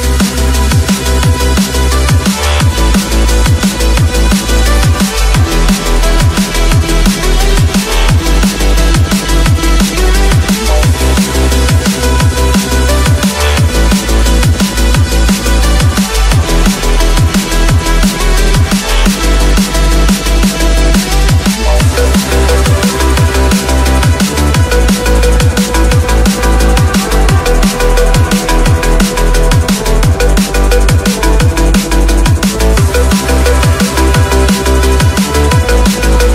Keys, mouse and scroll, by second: 0.0-0.5 scroll up 1, 0.5 middle click, 1.2-2.0 scroll down 4, 3.0-4.9 middle drag, 4.9 Tab, 5.6 Tab, 6.0 click, 7.5 click, 9.1 click, 10.1 shift+click, 13.1 KP_3, 13.6 KP_1, 15.0-15.7 scroll up 4, 16.2 e, 19.2 click, 20.3 click, 20.7 middle click, 21.5-22.2 scroll down 1, 22.2 click, 22.9-24.3 drag, 24.3 KP_3, 24.9 KP_1, 25.6-26.4 scroll up 5, 26.4 shift+middle click, 26.9-27.3 scroll up 2, 27.8-31.4 drag, 31.8-32.3 scroll down 1, 32.3-32.7 scroll up 1, 34.4 click, 34.8 Tab.